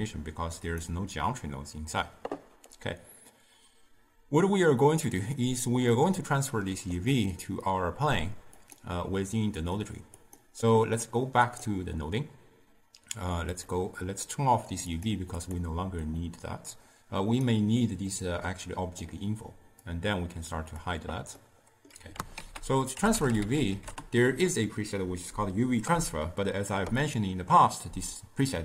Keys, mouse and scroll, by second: 6.0-8.8 middle drag, 8.8 click, 9.7 click, 10.5 click, 11.6 click, 13.6-15.6 drag, 16.8 click, 19.2-20.0 drag.